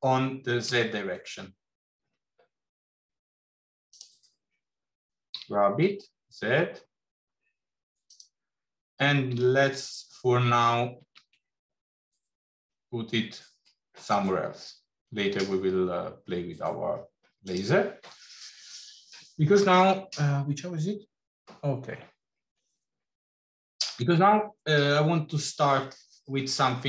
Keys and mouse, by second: 5.1 g, 9.1 g.